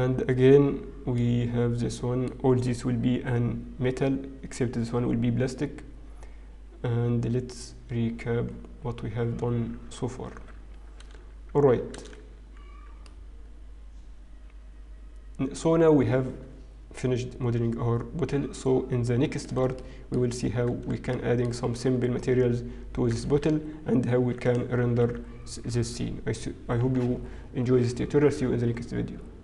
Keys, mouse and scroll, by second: 0.7 scroll down 1, 3.5 middle click, 5.9-6.7 scroll up 1, 7.7-9.8 scroll down 10, 9.8-12.8 scroll up 2, 12.8 alt+h, 12.8 scroll down 1, 12.8 a, 13.0 middle click, 19.7 shift+middle click, 20.3-20.9 scroll up 4, 21.1 shift+middle click, 21.9-22.7 scroll down 3, 25.7 ctrl+s, 25.7 click, 25.8 ctrl+s.